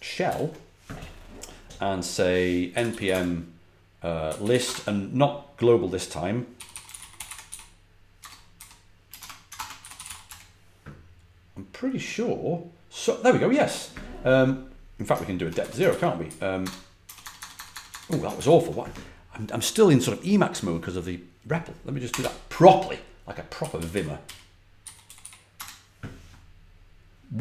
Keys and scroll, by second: 0.2 ctrl+l, 2.3-4.9 typing, 6.2-10.7 typing, 15.5 q, 15.8 ctrl+l, 16.1 Up, 16.5-17.6 typing, 18.3 ctrl+c, 22.0 Escape, 22.1 k, 23.2-25.6 typing.